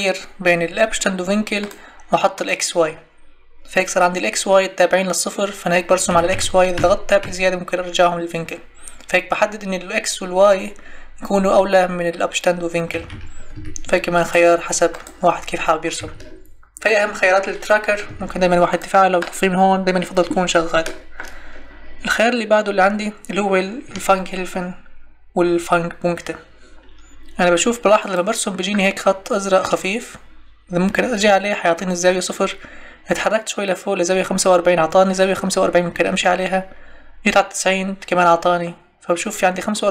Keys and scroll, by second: 6.1 Tab, 12.9 Tab, 16.0 Escape, 18.1 Escape.